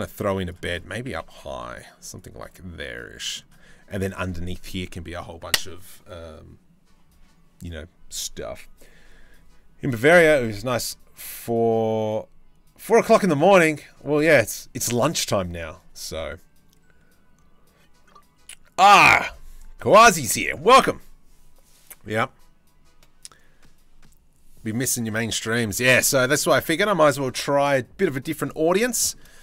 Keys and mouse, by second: 0.3 click, 0.7 g, 2.0-2.9 drag, 25.0 click, 25.5 shift+middle click, 26.4 click, 28.5 shift+middle click.